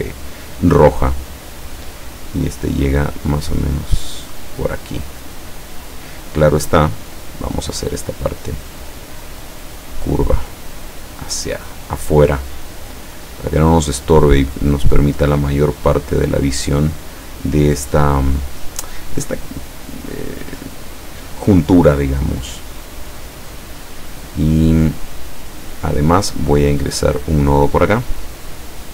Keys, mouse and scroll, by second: 2.7-6.2 drag, 7.6-11.4 drag, 13.9-17.1 drag, 26.7 click, 28.3-28.9 drag.